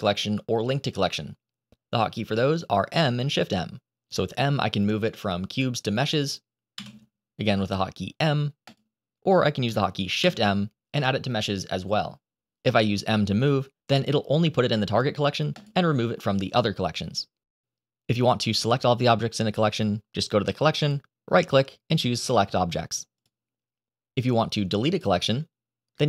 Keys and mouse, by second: 6.6 m, 10.1 shift+m, 18.9 click, 20.7-23.1 drag, 24.8 click.